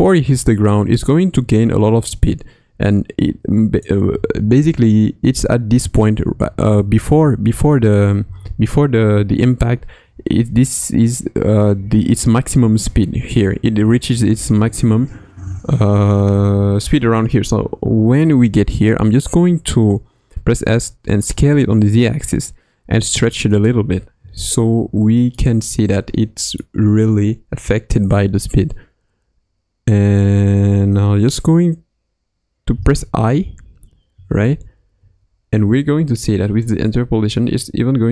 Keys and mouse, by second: 4.1 Left, 4.5 Right, 6.2 Right, 6.6 Left, 7.0 Left, 7.4 Right, 7.8 Right, 8.2 Left, 14.2 Left, 14.5 Right, 20.3 s, 25.3-27.5 middle drag, 32.7 i, 34.1 Left, 34.6 Right, 34.9 Right, 36.7-37.2 drag, 37.5-38.1 drag.